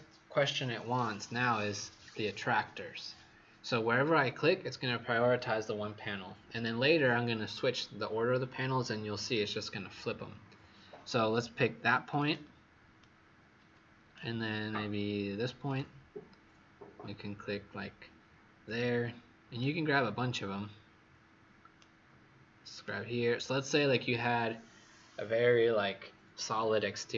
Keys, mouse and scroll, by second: 12.0 click, 12.9 right click, 15.6 click, 19.5 right click, 22.7 click.